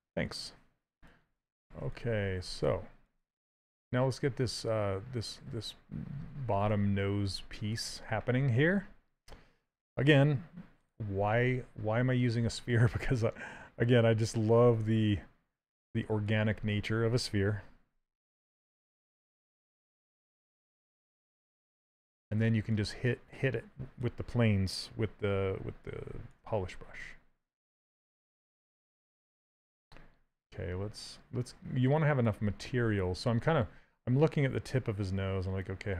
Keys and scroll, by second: 6.3 s, 17.2 w.